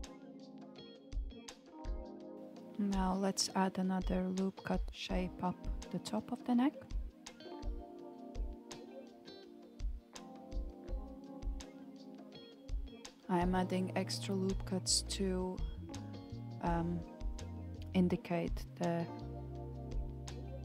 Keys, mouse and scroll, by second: 2.7-3.7 shift+middle drag, 3.7-4.3 scroll up 2, 4.3-5.6 shift+middle drag, 5.6 alt+z, 9.6-11.9 shift+middle drag, 11.9 ctrl+r, 18.6 ctrl+r.